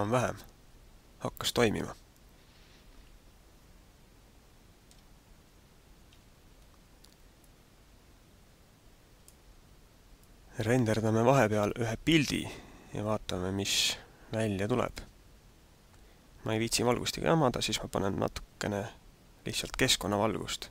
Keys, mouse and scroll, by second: 6.1 alt+a, 7.4 click, 14.8 click, 19.9 click.